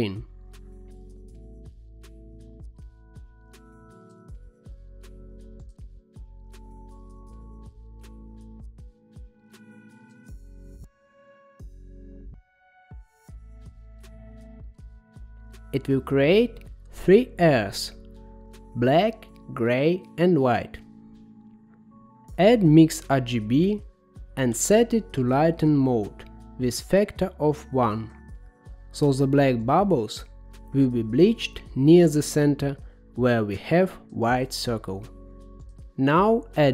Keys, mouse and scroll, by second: 0.5-1.2 scroll up 5, 1.4-2.6 scroll up 2, 2.6-4.8 drag, 5.1-6.5 middle drag, 6.5-7.7 scroll up 4, 7.7-10.0 drag, 10.9-18.6 drag, 19.1-20.2 scroll down 6, 20.2 middle click, 21.2 shift+a, 25.8 click, 27.3-30.3 drag, 31.5-32.7 middle drag, 33.6-34.5 scroll up 2, 34.5-36.7 drag.